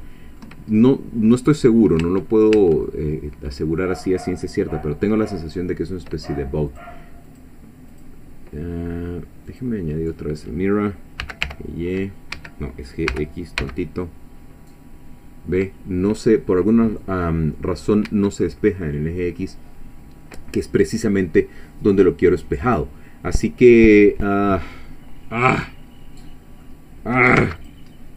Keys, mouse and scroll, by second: 0.0 shift+middle click, 0.8 shift+middle click, 2.0 Tab, 2.9-3.9 middle drag, 6.7 click, 7.3 click, 7.9 click, 9.5 click, 11.2 g, 11.4 y, 12.4 Escape, 13.1 g, 13.6 x, 18.1 Escape, 24.9-26.8 drag, 27.4 x, 27.6 click, 28.0-28.1 scroll down 2.